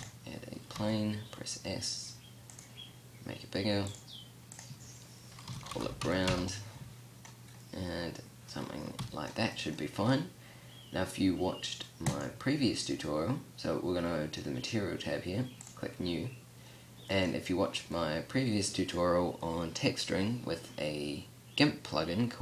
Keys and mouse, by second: 1.0 s, 4.1-4.7 middle drag, 7.8-8.5 middle drag, 9.2 t, 17.1-17.6 drag, 17.6-18.6 drag.